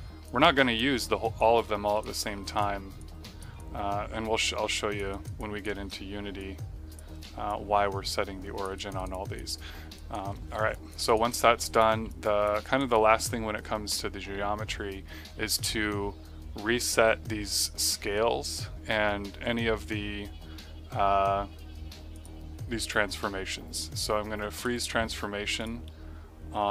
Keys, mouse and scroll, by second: 0.2 click, 2.1 click, 2.9 click, 3.5 click, 5.0 right click, 6.3 click, 7.0 d, 7.4 alt+click, 8.7 alt+right click, 9.0 right click, 9.1 click, 9.5 middle click, 9.9 right click, 10.3 q, 10.6 click, 11.0 right click, 11.2 alt+middle click, 11.6 click, 12.0 alt+click, 12.6 alt+right click, 12.8 click, 22.1 click, 24.5 click.